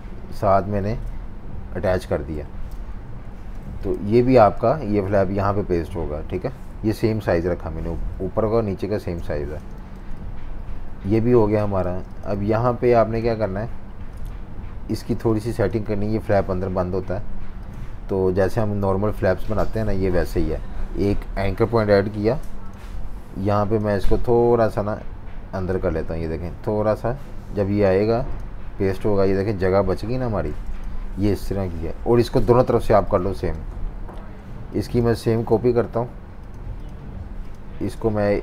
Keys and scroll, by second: 1.0 super+y, 2.1 super+y, 2.7 super+-, 2.9 super+-, 3.7-5.2 typing, 7.0 super+-, 7.2 super+-, 7.4 super+-, 9.0-10.0 typing, 11.8 v, 12.0 space, 12.5 z, 13.5 v, 15.1 z, 15.9 v, 22.2 a, 28.2 v, 30.5 super+z, 31.3 super+-, 31.5 super+-, 31.6 super+-, 32.8-33.7 typing.